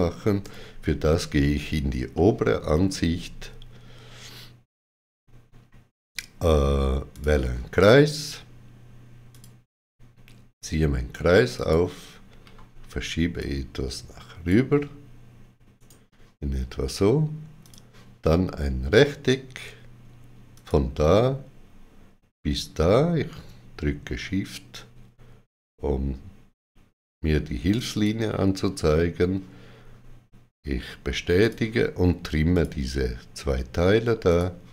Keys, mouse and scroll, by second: 0.3 middle click, 0.3 click, 0.3 x, 2.0 shift+middle click, 7.0 click, 7.0 shift+middle click, 9.2 click, 11.4 click, 12.3 g, 13.3 click, 15.6 right click, 17.5 click, 20.4 click, 27.6 click, 31.3 click.